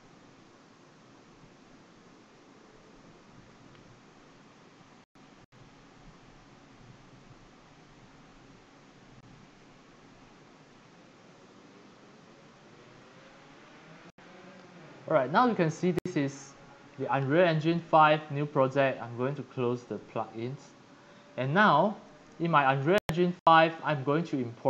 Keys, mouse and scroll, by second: 13.8 click, 16.9-17.9 scroll down 8, 19.8 click, 20.3-20.8 scroll down 2, 22.1-24.1 drag.